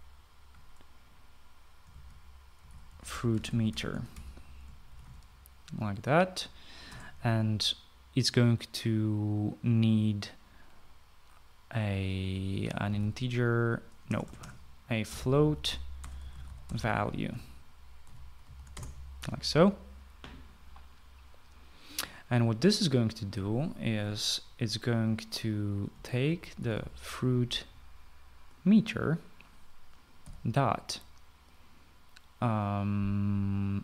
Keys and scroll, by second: 0.0-0.6 typing, 2.6-6.6 typing, 7.8 BackSpace, 13.5-19.4 typing, 19.7 Return, 27.0-28.3 typing, 31.2 ..